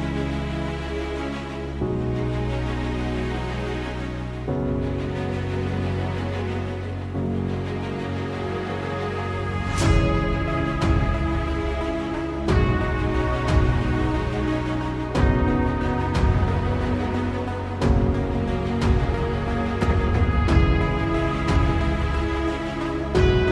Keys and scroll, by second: 4.7 ctrl+z, 5.1 ctrl+z, 6.0 ctrl+z, 7.1 ctrl+z, 7.6 ctrl+z, 12.9 ctrl+z, 13.0 ctrl+z, 14.4 ctrl+z, 15.4 ctrl+z, 15.5 ctrl+z, 19.7 ctrl+z.